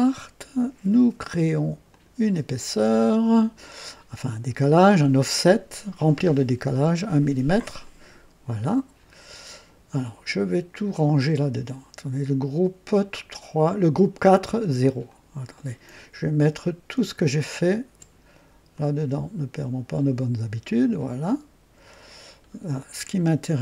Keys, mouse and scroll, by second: 0.0 click, 1.9 click, 3.0-3.8 right drag, 5.9 click, 7.8 click, 9.1 scroll down 1, 15.0 click, 16.3 click, 17.6 shift+click, 18.7-20.1 shift+drag, 21.8 click, 22.3-22.6 scroll down 1.